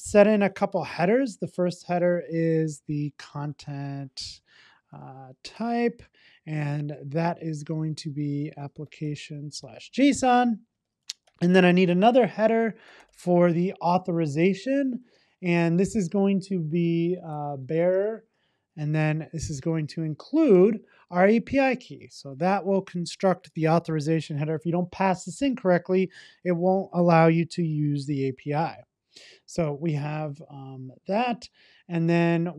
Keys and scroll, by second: 0.6 Return, 6.1 Return, 11.7 Return, 21.7 Return.